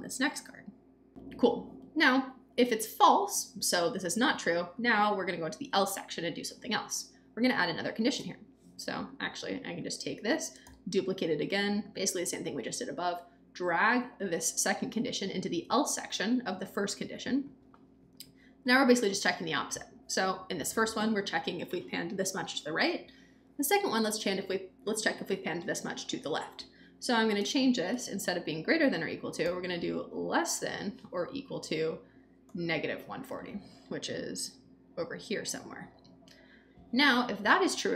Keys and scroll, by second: 10.6 super+d, 27.7 BackSpace, 28.6 shift+BackSpace, 29.3 shift+,, 30.2 shift+Right, 32.4 -, 32.7 Return.